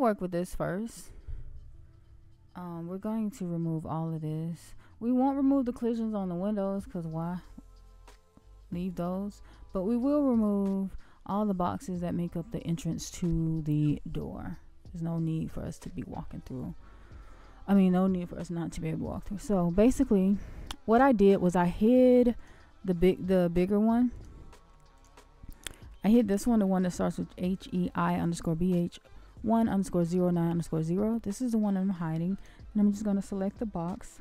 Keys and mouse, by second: 4.6-5.5 shift+middle drag, 6.6-7.3 shift+middle drag, 10.5 middle click, 11.5-11.9 shift+middle drag, 22.3 shift+click, 24.1 shift+click, 24.9 shift+click, 31.3 shift+click, 32.3 click, 33.7 middle click.